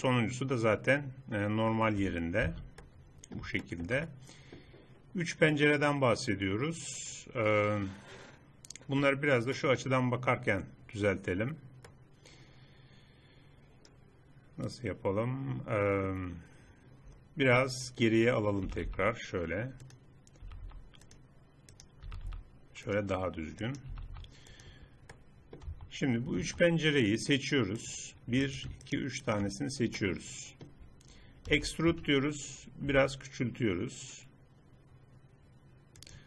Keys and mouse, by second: 2.4 z, 7.4 middle click, 9.6-11.8 drag, 12.0 click, 12.2 middle click, 16.4 middle click, 18.7 g, 20.4 g, 21.7-23.5 drag, 22.1 g, 24.0 g, 25.7 Tab, 26.4 Tab, 28.0-30.0 middle drag, 31.5 e, 34.0 s.